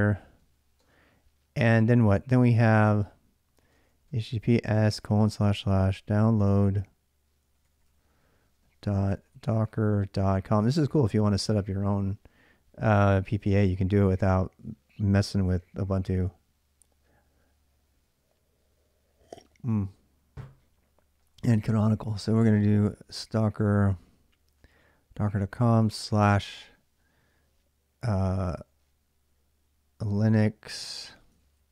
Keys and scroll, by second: 0.6 typing, 3.5-10.0 typing, 22.9 Tab, 23.0 Tab, 23.7 Tab, 24.8-25.9 typing, 28.1-29.0 typing, 30.4-31.2 typing, 31.4 ctrl+a.